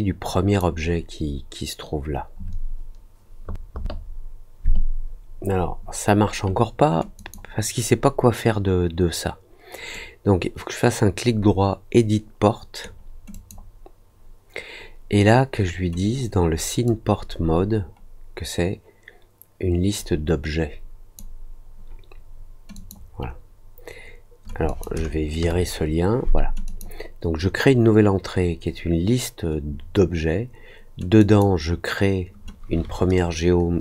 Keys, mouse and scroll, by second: 7.1 click, 9.9-12.7 right drag, 13.3 click, 16.8-21.1 drag, 22.7 click, 24.6 click, 26.6 click, 31.1 click.